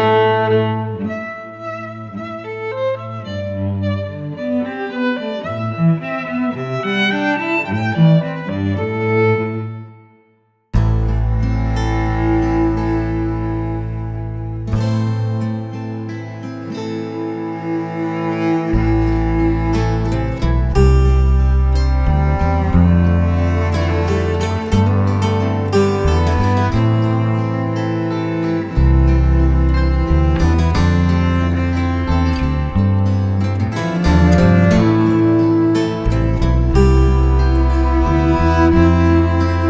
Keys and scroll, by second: 0.9 Escape, 1.4 Escape, 3.3 Escape, 4.9 Escape, 6.5 Escape, 6.7 Escape, 9.1 e, 10.0 Escape, 10.4-11.5 typing, 10.8 Escape, 11.3 Escape, 11.5 Escape, 12.3 Escape, 12.8 Escape, 12.9 f, 13.0 space, 14.4 Escape, 14.9 Escape, 14.9 j, 14.9 space, 15.5 Escape, 16.7 Escape, 17.6-18.7 typing, 19.7-24.9 typing, 24.1 Escape, 25.4 Escape, 25.5 Escape, 26.2 Escape, 27.2 Escape, 27.3 Escape, 27.5 Escape, 27.7 h, 29.8 space, 30.5 Escape, 31.1 Escape, 32.7 Escape, 35.0 Escape, 36.8 Escape, 37.1-39.6 typing.